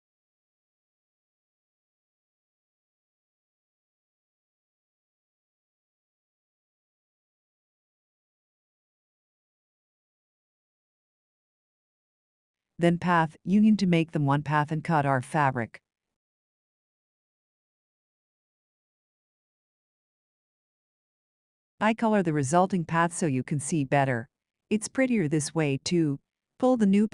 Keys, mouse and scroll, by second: 7.1 ctrl+scroll, 8.5 shift+click, 10.1 shift+click, 11.4 scroll, 16.2 click, 16.7-17.5 ctrl+scroll, 17.7 scroll, 20.4 click, 21.3-21.9 scroll, 22.3-22.8 ctrl+scroll, 23.6-23.9 shift+scroll.